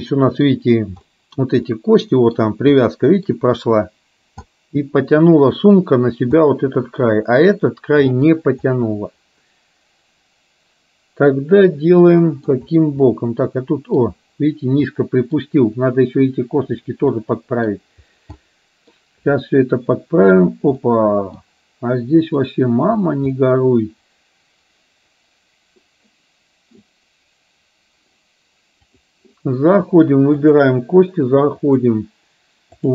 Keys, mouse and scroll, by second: 0.1 scroll up 1, 0.4 middle click, 0.6-1.0 scroll down 1, 1.1 middle click, 1.8-2.4 scroll up 1, 2.9 middle click, 4.5-5.3 scroll up 1, 6.5-7.0 scroll up 1, 8.8-12.6 middle drag, 13.1-14.1 scroll up 1, 14.9-15.5 middle drag, 14.9-15.5 scroll up 1, 17.1-17.8 middle drag, 17.1-17.8 scroll up 1, 18.4-19.0 middle drag, 19.4-20.5 middle drag, 20.9 middle click, 20.9-21.5 scroll up 1, 22.3 click, 23.5-25.9 middle drag, 29.0 click, 30.5 click, 31.6-32.9 drag.